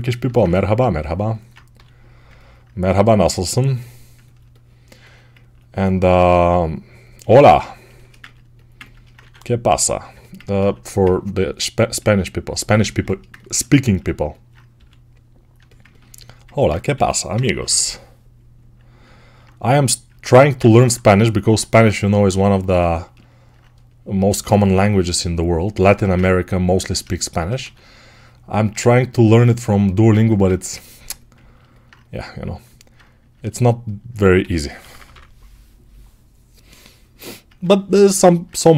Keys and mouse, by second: 0.1 alt+click, 0.2 right click, 0.3 ctrl+click, 1.0-4.6 right drag, 1.6 g, 4.6-7.7 ctrl+alt+drag, 7.7-15.4 alt+shift+right drag, 9.0 2, 10.6 1, 14.6 g, 15.4-25.7 ctrl+alt+drag, 17.2 g, 17.2 ], 17.4 ], 25.7-30.8 right drag, 25.7 1, 27.5 2, 30.0 1, 34.0-38.7 right drag, 34.3 g, 34.7 [, 34.8 [.